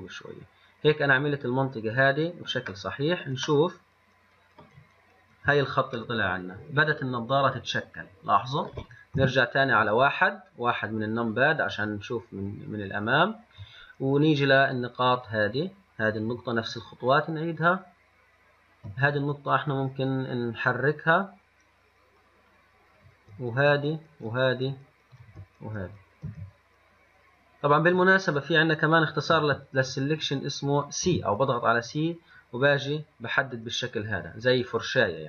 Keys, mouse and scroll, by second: 3.8 scroll down 1, 3.9-5.0 middle drag, 5.0 scroll up 1, 5.1-5.9 scroll down 5, 6.3-9.4 middle drag, 9.4 KP_1, 12.4-13.2 scroll up 3, 15.4 click, 17.0 shift+click, 17.8 shift+click, 19.3 click, 23.9 shift+click, 24.5 shift+click, 25.4 shift+click, 26.5 c, 30.4 click, 31.3 c.